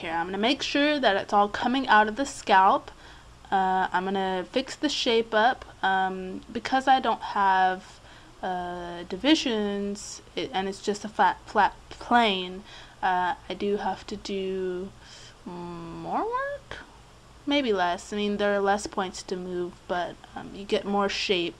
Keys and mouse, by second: 1.5-5.5 right drag, 2.4-4.3 drag, 5.5 middle click, 5.9 click, 5.9 right click, 6.1 click, 6.5 right click, 13.6 right click, 14.9 click, 15.1 click, 16.8-18.5 right drag, 18.5-19.9 middle drag, 20.8 middle click.